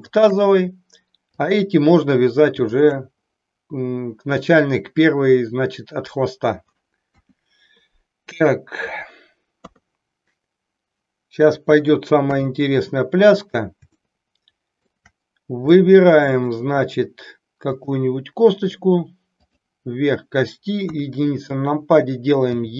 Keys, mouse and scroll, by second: 0.1 shift+click, 1.4 click, 2.6 shift+click, 7.0 KP_1, 9.5 KP_3, 12.3 KP_1, 14.1 shift+middle click, 15.6-16.6 middle drag, 17.7 click, 20.8 KP_1, 22.6 e.